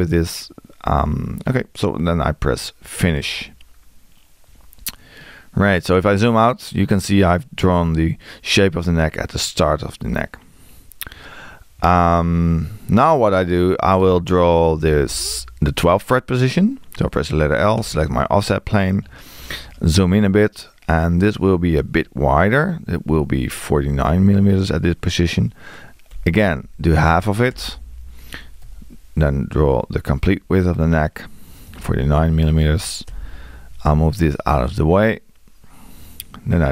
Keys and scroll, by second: 12.2 Escape, 23.9 4, 31.7 4.